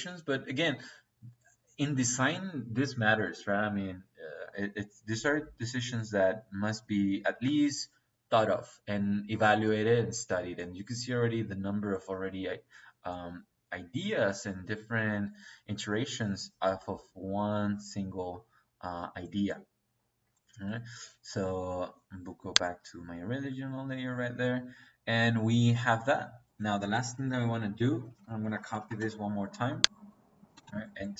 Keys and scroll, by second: 27.1 c, 27.8 Escape, 28.4-29.0 typing, 30.5 space.